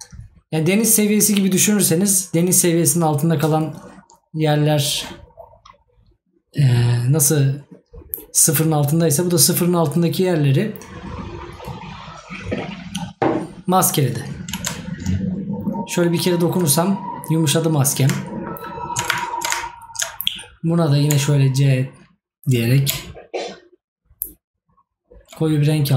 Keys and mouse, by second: 18.2 right click.